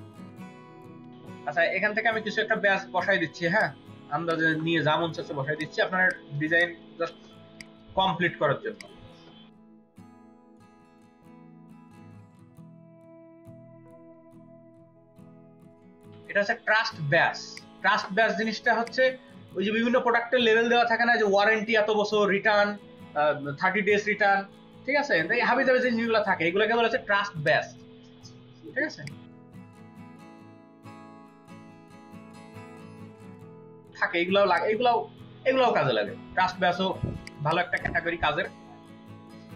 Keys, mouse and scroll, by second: 0.1 click, 0.1 space, 3.5-5.5 drag, 3.5 right click, 5.9-8.8 drag, 5.9 space, 6.5-8.8 ctrl+middle drag, 6.9 ctrl+v, 10.1 right click, 10.3 double click, 11.1 Delete, 11.3 space, 11.5 space, 12.2 ctrl+g, 12.5 ctrl+g, 12.9 ctrl+g, 13.1 space, 14.6 space, 15.5 ctrl+click, 15.6 ctrl+click, 15.7 space, 37.1 ctrl+space, 37.3 ctrl+click, 37.3 ctrl+double click, 37.5 ctrl+space, 39.3 typing.